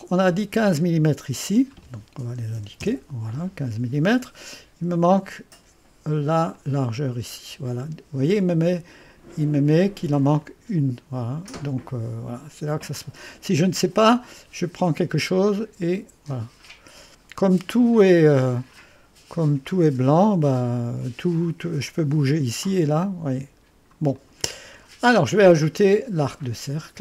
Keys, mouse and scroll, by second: 1.4 click, 2.1 click, 2.2-3.1 typing, 6.5-8.4 drag, 10.4 click, 14.3-17.8 drag, 22.0-23.9 drag, 24.2 click.